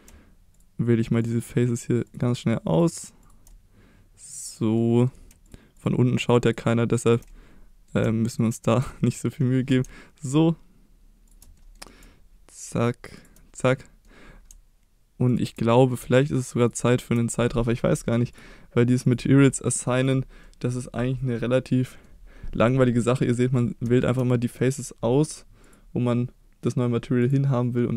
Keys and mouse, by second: 0.5 shift+click, 1.2 shift+click, 2.1 shift+click, 2.8 shift+click, 4.8 middle click, 6.2 shift+click, 6.5 shift+click, 7.3 middle click, 8.9 middle click, 10.2 ctrl+click, 11.6 middle click, 13.6 middle click, 15.7 middle click, 16.6 ctrl+click, 18.3 click, 19.0 click, 19.7 middle click, 20.1 click, 20.4 middle click, 21.4 middle click, 22.6 middle click, 23.3 middle click, 24.0 shift+middle click, 24.4 middle click, 25.6 click, 27.3 click.